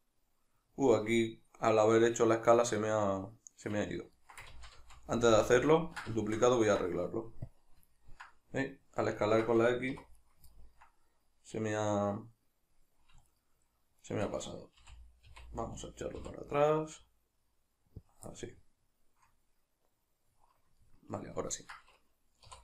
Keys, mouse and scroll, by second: 4.2 ctrl+middle click, 4.6 ctrl+z, 6.3 shift+middle click, 7.5 click, 8.0-10.2 ctrl+middle drag, 9.9 2, 10.2 right click, 10.5-13.3 ctrl+middle drag, 13.3 shift+right click, 14.1 shift+right click, 14.8 g, 18.1 click, 18.3-22.6 middle drag, 22.5 3.